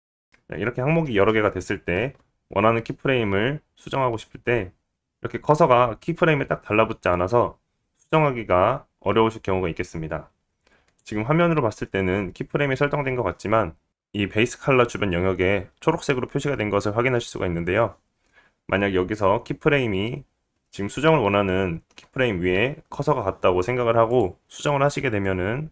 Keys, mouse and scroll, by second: 1.0 i, 2.8 click, 2.8 middle click, 5.7-13.9 drag, 5.7-16.6 right drag, 16.6-25.3 drag, 25.4-25.7 drag.